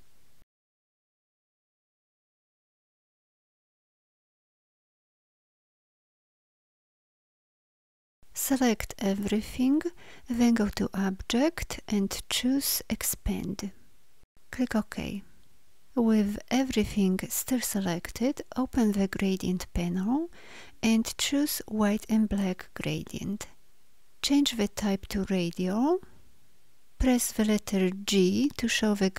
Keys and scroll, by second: 2.2 Delete, 4.1 Delete, 5.6 Delete, 7.1 Delete, 8.4 ctrl+a, 28.0 g.